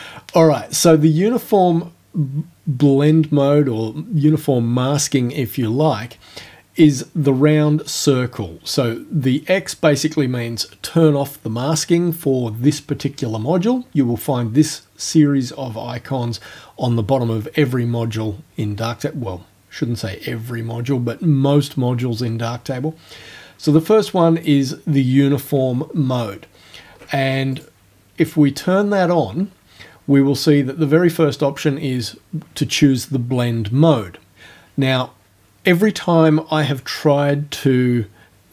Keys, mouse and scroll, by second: 24.5 click, 25.9-26.7 ctrl+alt+scroll down 2, 27.6 click.